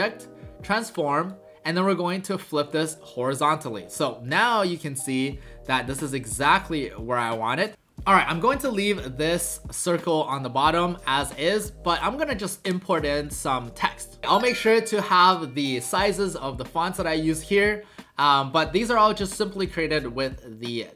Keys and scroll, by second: 7.7 shift+w.